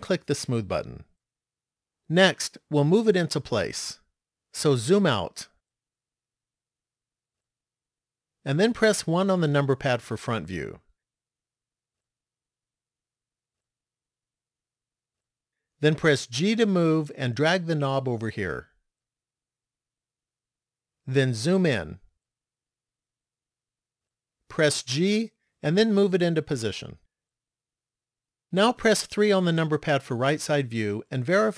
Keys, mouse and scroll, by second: 0.5 click, 4.9-7.4 scroll down 9, 7.4-8.4 scroll down 1, 9.3 KP_1, 12.2 shift+middle click, 16.6 g, 21.3-23.1 scroll up 3, 25.0 g, 29.2 KP_3.